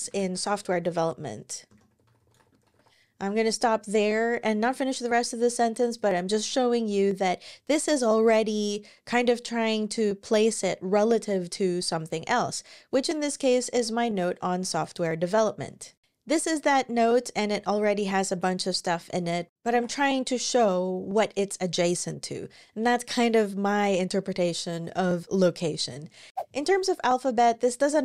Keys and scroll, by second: 0.0-3.7 typing, 19.5 super+w.